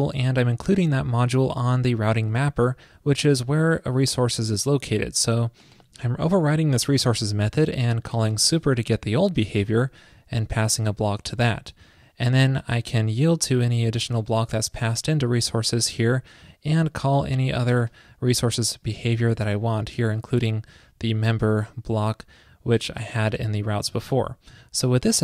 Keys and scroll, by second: 24.0 super+s.